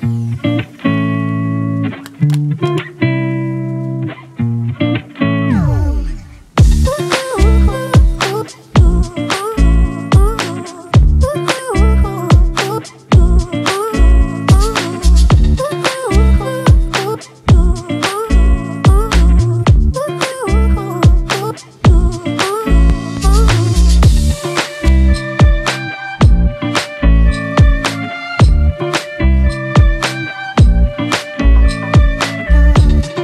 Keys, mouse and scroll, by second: 0.0-2.4 scroll down 1, 14.4 ctrl+t, 15.4 alt+shift+click, 16.7 ctrl+z, 20.9 Return, 29.0 double click, 31.2-31.8 [, 32.0-32.5 [, 32.9 double click.